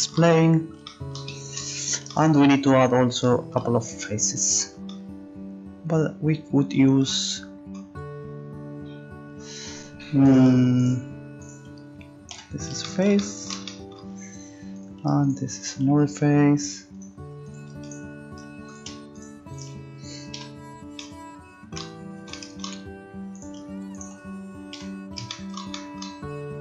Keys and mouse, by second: 10.3-12.4 right drag, 12.5 e, 13.1 click, 14.8-20.3 right drag, 20.3 e, 22.1 click, 23.3-25.5 right drag, 24.7 f, 25.5 middle click.